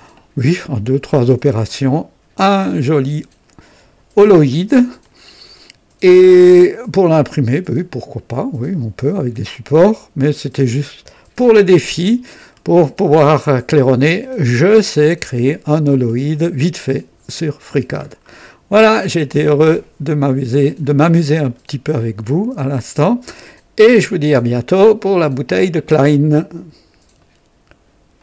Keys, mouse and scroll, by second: 3.1 typing, 5.0-11.6 drag, 5.3-6.7 typing, 8.8-9.5 typing, 12.0-13.7 drag, 12.7 typing, 13.9-16.3 drag, 14.6-16.1 typing, 17.2-17.5 scroll up 1, 18.0-18.3 scroll down 1, 18.3-20.1 typing, 18.4-19.1 right drag, 19.1-21.2 drag, 21.4-23.6 drag, 22.1-22.8 typing, 23.8-25.3 drag, 27.1 right click, 28.1 click.